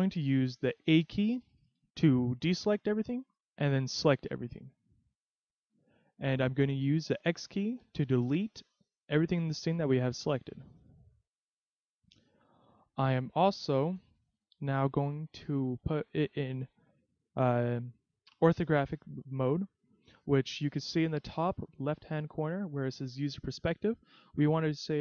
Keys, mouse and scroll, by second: 0.9 a, 1.6 a, 2.4 a, 3.3 a, 7.2 x, 12.4-14.4 scroll up 21.